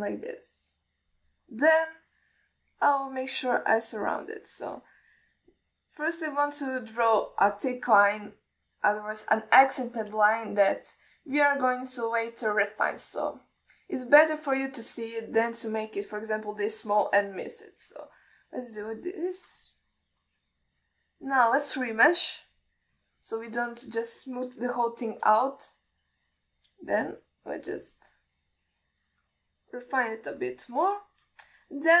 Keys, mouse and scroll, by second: 2.9-4.0 middle drag, 4.3-5.3 drag, 5.5 middle click, 6.8-8.3 drag, 10.1 click, 11.6-12.0 alt+shift+middle drag, 13.5 alt+shift+middle drag, 14.5-14.8 shift+middle drag, 16.6-17.1 drag, 18.4 click, 19.4 alt+middle click, 20.1 click, 20.9 middle click, 21.9 click, 23.1-24.3 drag, 24.5 alt+middle drag, 25.8 KP_1, 26.6-27.9 shift+drag, 28.4 click, 28.8 click, 29.2-30.2 drag, 30.5 middle drag, 31.1 click, 31.9-32.0 alt+middle drag.